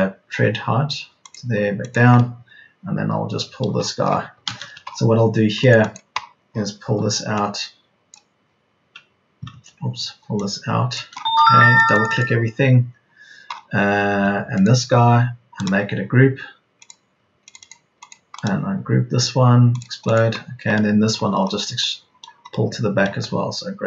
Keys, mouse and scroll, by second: 4.1 Escape, 6.8 p, 9.5 ctrl+z, 11.4 Escape, 13.1 Escape.